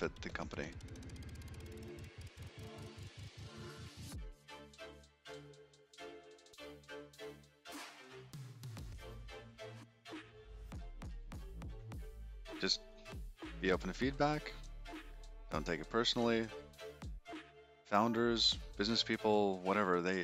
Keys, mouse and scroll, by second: 10.3 shift+middle click, 12.2 shift+middle click.